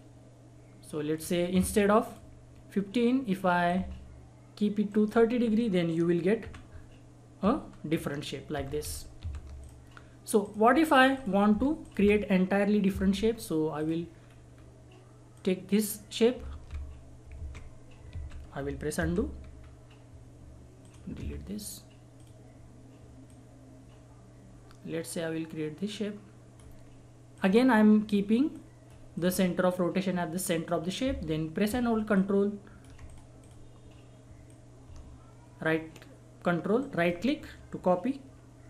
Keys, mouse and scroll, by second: 4.9 ctrl+right click, 6.4 r, 8.5 ctrl+z, 9.6 click, 10.8 scroll down 1, 11.1 click, 11.2 click, 11.5 Delete, 11.8 click, 12.0 Delete, 13.7 click, 14.2-14.5 scroll up 1, 14.5-15.3 scroll down 1, 15.3 click, 16.5 ctrl+z, 19.6-20.1 scroll up 1, 20.8 click, 21.2 Delete, 22.1-27.3 drag, 27.7-28.0 scroll down 1, 28.0-28.5 scroll up 1, 28.5 click, 32.1-36.8 ctrl+drag, 36.8 ctrl+right click.